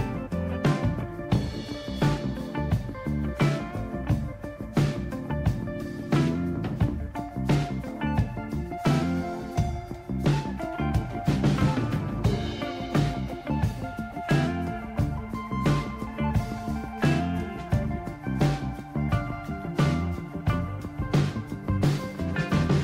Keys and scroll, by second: 1.7 Down, 2.2 Down, 2.2-2.6 Down, 5.8-10.2 Right, 10.5 Right, 10.6 Right, 10.9 Right, 12.5 Delete, 12.8 Delete, 13.1 Delete, 13.4 Delete, 17.8 Down, 18.6 Down, 19.4 Down, 20.4-21.1 Left.